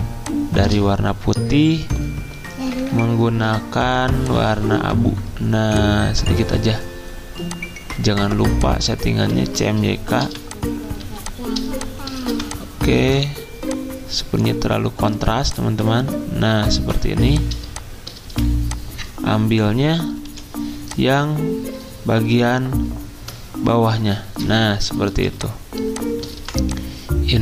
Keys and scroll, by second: 2.8 F6, 10.2-11.0 typing, 12.3-13.1 typing, 17.1-19.0 typing, 20.3 o, 24.1 s, 24.5 o, 25.0 z, 26.3 typing.